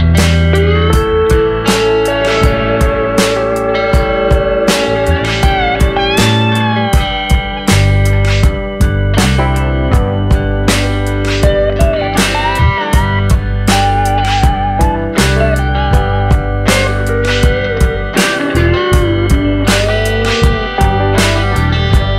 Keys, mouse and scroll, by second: 0.2-0.6 scroll up 2, 0.6 scroll down 1, 1.2 ctrl+j, 1.5 middle click, 2.0 scroll up 4, 2.7 g, 3.5 ctrl+click, 3.9 ctrl+click, 4.4 shift+click, 5.3 shift+click, 6.2 ctrl+j, 6.4 scroll down 2, 6.6 middle click, 7.1 Tab, 7.4 scroll down 1, 7.5 middle click, 7.8-8.3 scroll up 3, 8.3 scroll down 1, 8.4 scroll down 1, 8.5 middle click, 9.1 a, 9.2-9.8 scroll up 3, 9.5 middle click, 9.8-10.5 scroll down 1, 10.5 click, 10.5-10.9 scroll down 1, 12.2 Tab, 12.8 Tab, 13.4 click, 14.0 click, 14.4 click, 15.1 scroll down 2, 15.3 middle click, 17.2 click, 17.7 scroll down 2, 17.9 middle click, 18.2-18.6 scroll up 4, 19.4 click, 20.5 click, 21.3-21.8 scroll up 2, 21.8 click.